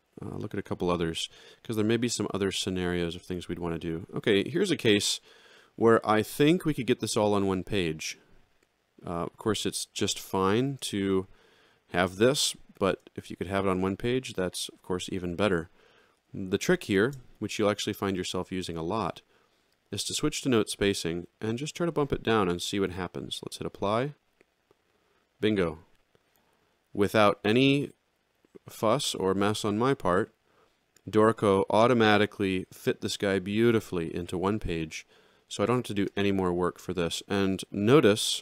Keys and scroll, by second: 1.8 alt+shift+], 3.2 alt+x, 10.6 alt+shift+[, 12.7 alt+shift+], 16.9 ctrl+shift+l.